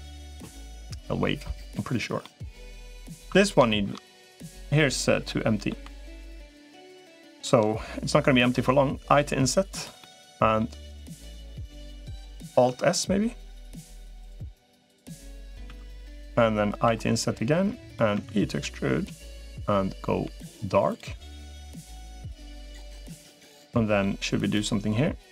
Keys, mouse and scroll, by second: 2.0 middle click, 3.1 Tab, 3.5 shift+middle click, 4.6 middle click, 7.1 shift+click, 9.9 middle click, 12.5 alt+s, 16.7 i, 17.9 e, 19.9 g, 21.1 click, 21.3 middle click, 23.1 shift+click, 23.4 middle click, 24.3 click.